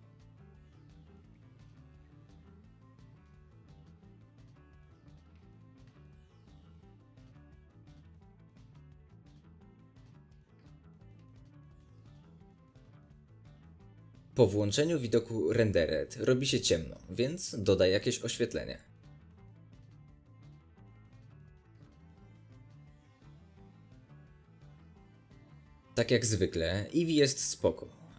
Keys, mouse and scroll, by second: 0.0 middle click, 0.2-0.6 drag, 0.6 middle drag, 0.8 scroll down 2, 0.9-1.7 drag, 1.7 middle click, 2.0-2.8 drag, 2.8 middle drag, 3.0 drag, 3.2-3.5 middle drag, 3.5-4.5 drag, 4.5-4.9 middle drag, 4.9 click, 5.1-5.4 middle drag, 5.4 drag, 5.6 middle click, 6.1-7.0 drag, 7.0-8.2 middle drag, 7.3 scroll up 2, 8.2 click, 8.3-9.1 shift+middle drag, 9.1 click, 9.2 middle drag, 9.4-11.0 drag, 10.1-10.9 scroll down 1, 11.0-15.8 middle drag, 11.0-15.8 scroll up 2, 15.8 z, 21.9 click, 23.1 click, 23.3-24.8 scroll down 1.